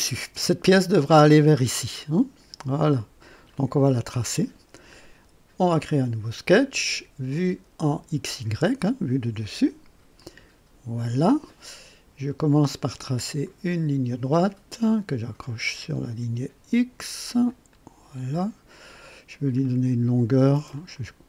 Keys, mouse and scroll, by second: 3.5-4.4 right drag, 5.6 click, 7.8 click, 10.1 click, 13.4 click, 15.4 click, 17.7 click, 18.3 right click, 19.6 right click, 20.7 click.